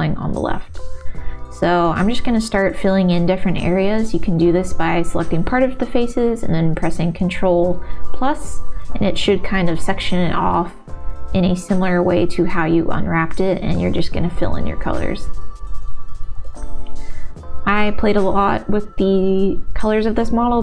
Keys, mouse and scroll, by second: 1.7 ctrl+KP_Add, 1.9 ctrl+KP_Add, 2.1 ctrl+KP_Add, 2.5 ctrl+KP_Add, 6.7 click, 12.3 shift+middle click, 13.1 Tab, 13.8 a, 14.0 u, 17.3-18.7 drag.